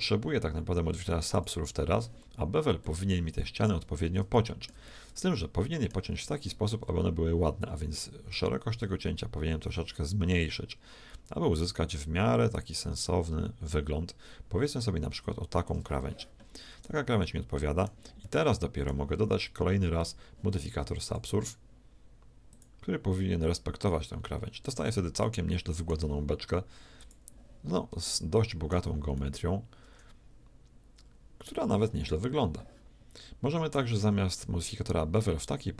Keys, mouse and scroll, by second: 1.4-3.1 drag, 2.8 middle click, 3.9 z, 6.4 z, 6.9-8.3 middle drag, 8.3-10.1 drag, 17.1-21.0 middle drag, 21.0-22.9 drag, 24.1-26.6 middle drag, 27.0-28.7 drag, 28.7-30.9 middle drag.